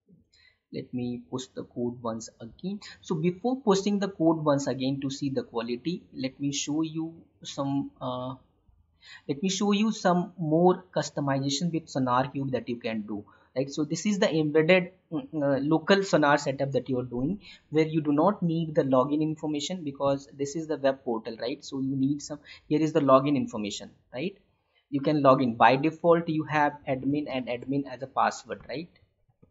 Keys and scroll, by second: 20.1 alt+Tab, 27.5 Tab.